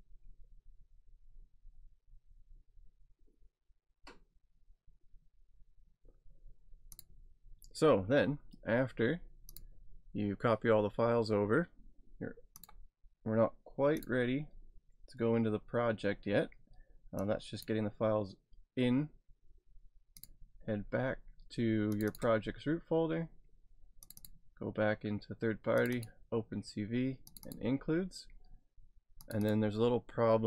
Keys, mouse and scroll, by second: 0.6-1.2 scroll down 1, 1.2 scroll down 1, 2.3 scroll down 1, 7.0 click, 9.5 click, 12.6 click, 13.9 click, 14.5 scroll down 2, 17.3 click, 20.2 click, 21.9 click, 24.1 click, 25.8 click, 29.3 click.